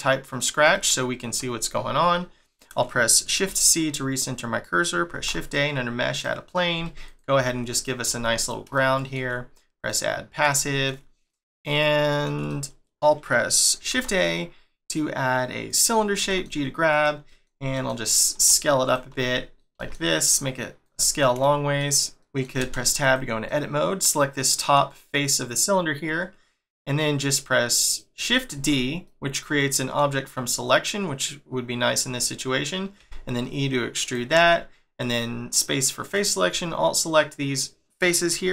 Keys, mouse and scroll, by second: 3.4 shift+c, 4.0 scroll down 2, 5.1 shift+a, 6.7 s, 8.7 shift+middle click, 9.8 click, 10.5 shift+middle click, 11.0-11.3 scroll up 1, 11.3 middle click, 13.9 shift+a, 16.2 g, 17.2 middle click, 17.7 s, 20.8 middle click, 21.9 scroll up 2, 22.6 Tab, 23.0 click, 23.4 middle click, 25.2 middle click, 27.9 middle click, 28.5 shift+d, 29.0 middle click, 36.0 alt+click, 36.9 middle click.